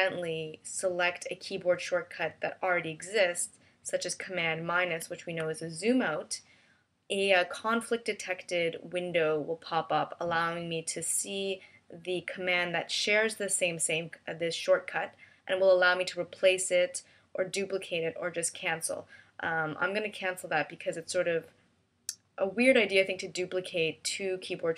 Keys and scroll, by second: 4.7 super+-.